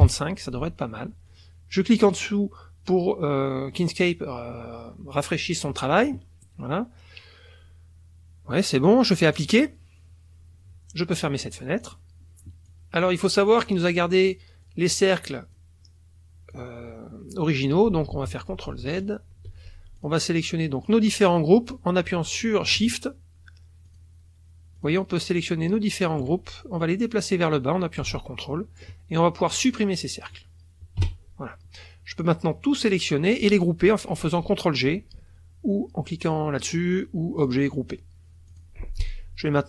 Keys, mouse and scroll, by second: 0.0 KP_5, 1.3 click, 9.3 click, 11.5 click, 11.8 click, 12.6 click, 13.4 click, 14.0 click, 14.6 click, 15.2 click, 16.5 click, 18.1 ctrl+z, 20.0 ctrl+click, 20.8 click, 22.9 ctrl+shift+click, 23.9 shift+click, 24.8 shift+click, 25.6 shift+click, 26.8-29.0 drag, 29.5 click, 31.0 Delete, 32.2-33.2 drag, 37.4 click, 38.5 click.